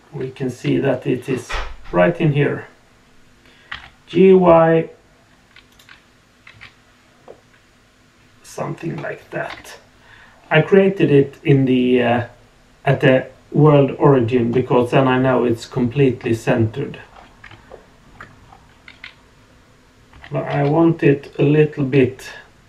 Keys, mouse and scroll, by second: 7.2-8.6 middle drag, 9.4 KP_1, 16.4-16.8 scroll up 3, 17.1 scroll down 2, 17.7-18.0 shift+middle drag, 18.4 scroll up 2, 20.1 g.